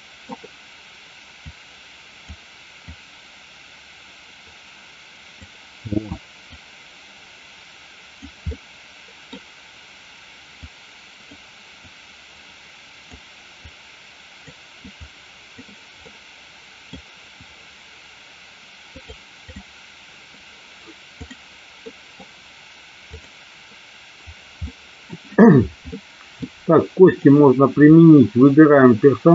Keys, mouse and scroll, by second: 1.5 click, 2.9-5.4 drag, 6.7-8.3 drag, 8.5 middle click, 10.8 click, 11.9-13.3 drag, 13.8 click, 15.2 click, 16.0 middle click, 19.2 click, 21.3 click, 21.9 middle click, 23.0 click, 24.7 middle click, 26.0 middle click, 27.2 click.